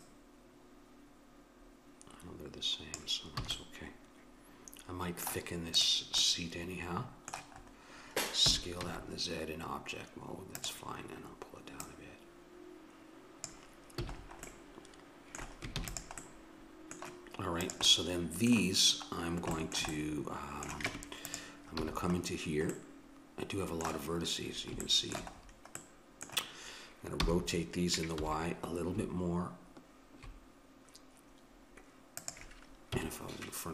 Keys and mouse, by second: 3.4 a, 3.6-4.7 middle drag, 5.7-7.6 drag, 8.5 s, 11.9-13.7 drag, 14.0 a, 14.5 middle click, 15.8 ctrl+s, 17.8 click, 20.9 Tab, 21.8 a, 22.8-27.3 middle drag, 27.2 r, 27.3-29.7 drag, 32.9 KP_1.